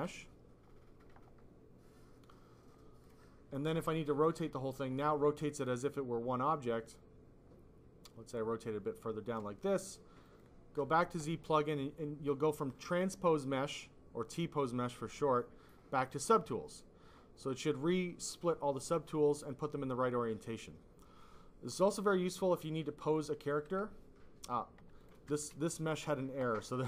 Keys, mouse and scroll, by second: 0.1 F5, 3.0 click, 4.6 click, 5.1 click, 5.8 click, 10.2 click, 10.5 click, 23.9 F5, 24.9 click, 25.3 click.